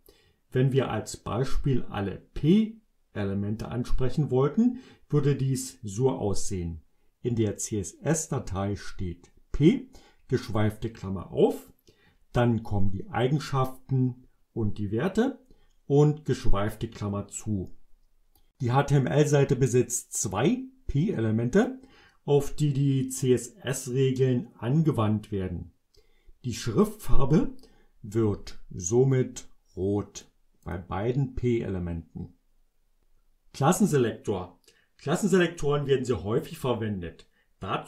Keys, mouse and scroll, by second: 19.7-21.8 drag, 29.2-30.4 drag, 30.7 click.